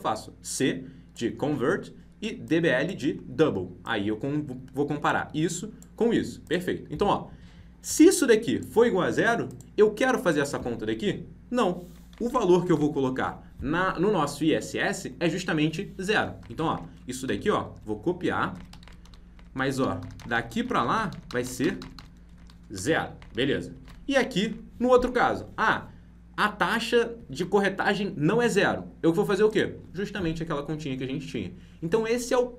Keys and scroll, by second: 12.7 ctrl+shift+Left, 18.8 ctrl+c, 23.7 ctrl+v.